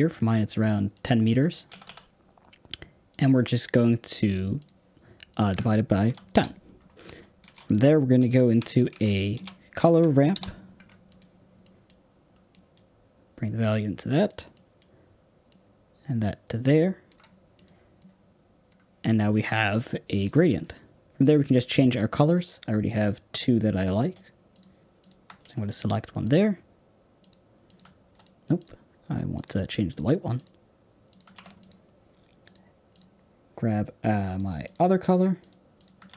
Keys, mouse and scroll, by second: 1.4 click, 1.6 x, 1.8 x, 3.0 click, 4.6 click, 5.3-10.2 drag, 10.2 o, 14.4-17.0 drag, 17.5 click, 17.9-21.2 middle drag, 21.2 click, 22.0 click, 28.1 click, 29.3-30.4 drag.